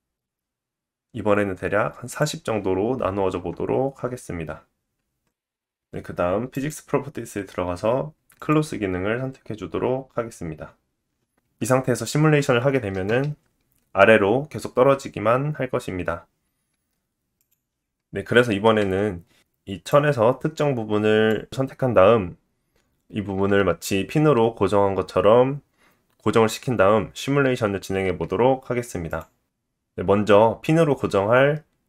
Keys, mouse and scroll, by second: 2.2-6.5 drag, 3.4 Tab, 6.7-11.3 drag, 13.1 space, 16.5 space, 17.4 click, 20.7-22.5 drag, 24.5 click, 26.6-27.6 drag, 27.7-31.8 drag.